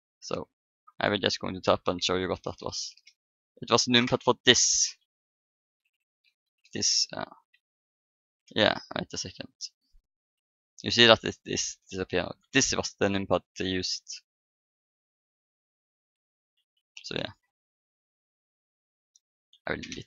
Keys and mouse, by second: 0.6 Tab, 2.3-2.6 BackSpace, 2.8 BackSpace, 2.9 BackSpace, 8.5 BackSpace, 8.5 KP_7, 8.6 Tab, 10.2 KP_7, 10.9 Tab, 12.4 KP_Decimal, 15.6 Tab, 16.4 Tab, 17.1-19.5 middle drag, 19.5 Delete, 19.7 middle click.